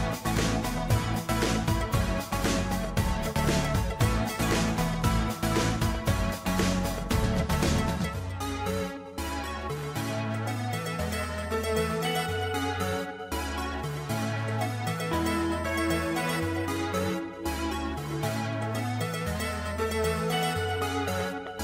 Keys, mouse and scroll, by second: 6.5 ctrl+t, 6.7 ctrl+t, 8.3 alt+click.